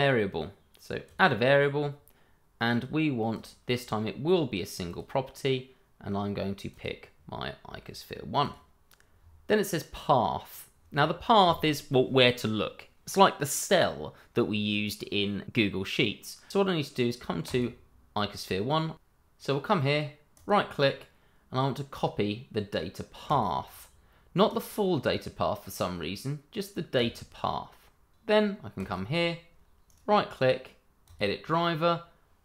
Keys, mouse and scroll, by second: 1.2 click, 1.6 scroll down 1, 3.3 click, 9.0 scroll down 1, 17.4 click, 20.3 right click, 23.2 click, 24.5 right click, 26.9 click, 29.8 right click, 31.0 click.